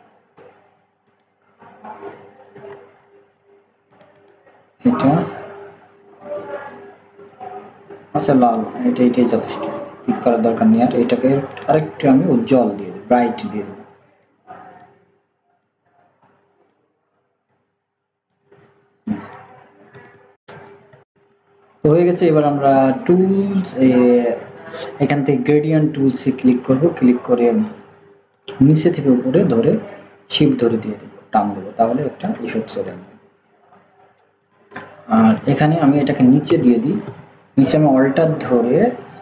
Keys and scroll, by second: 2.7 ctrl+z, 21.0 ctrl+z, 36.5 ctrl+[.